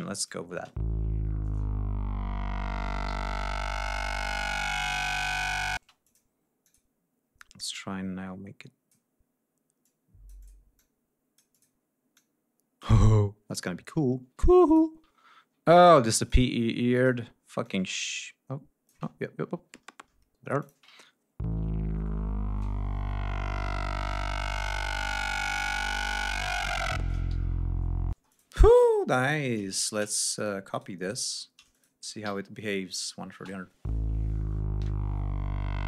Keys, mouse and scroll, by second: 0.1 click, 0.5 space, 2.0 ctrl+scroll down 2, 3.0 g, 4.3 ctrl+d, 4.5 ctrl+scroll up 2, 5.7 space, 6.0 click, 6.6 click, 7.7-9.1 drag, 9.8 click, 10.7 click, 12.1 click, 13.5 ctrl+scroll down 2, 14.0 ctrl+scroll down 2, 14.6 ctrl+click, 15.1-15.4 ctrl+scroll up 2, 16.2 click, 16.9 click, 17.6-19.0 drag, 19.0 ctrl+alt+scroll down 2, 20.6 click, 20.7 space, 21.0 ctrl+scroll down 2, 21.3 ctrl+scroll up 2, 27.3 g, 27.6 ctrl+scroll down 2, 28.1 ctrl+space, 28.3 ctrl+click, 29.2 click, 29.8-30.6 shift+drag, 30.7 shift+right click, 31.7 shift+click, 32.2 alt+shift+d, 33.0 alt+click, 33.3 alt+space.